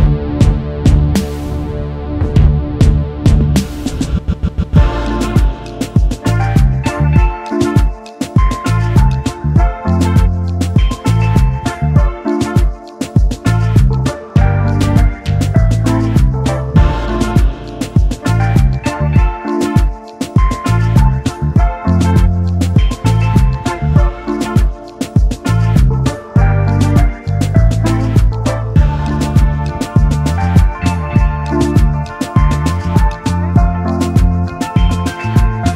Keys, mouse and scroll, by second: 1.2 double click, 1.5 shift+click, 2.8 double click, 4.2 shift+click, 5.9 double click, 6.0 alt+scroll up 1, 7.4-7.7 alt+scroll up 1, 7.7 shift+click, 9.0 shift+click, 12.0 shift+click, 14.6 shift+click, 15.5 shift+click, 18.2 shift+click, 19.5 double click, 24.1 space, 24.6 alt+scroll down 1, 24.8 space, 29.5 double click, 30.2 space, 31.1 alt+scroll up 1, 31.6 alt+scroll down 1, 31.9 space, 33.0 right click, 35.2 double click.